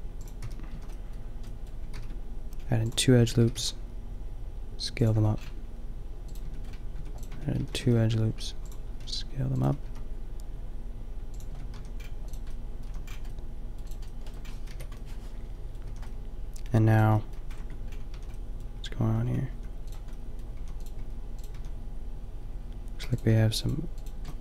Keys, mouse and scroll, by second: 0.4 t, 0.8 a, 2.0 ctrl+r, 3.4 s, 5.1 Tab, 6.3 Tab, 7.0 Tab, 7.3 Tab, 7.6 a, 7.8 ctrl+r, 9.0 s, 9.7 s, 10.5 click, 11.4 Tab, 11.7 a, 12.4-12.8 middle drag, 12.8 a, 14.7 KP_5, 15.9 a, 17.6 Tab, 18.2-21.5 typing, 23.0 a.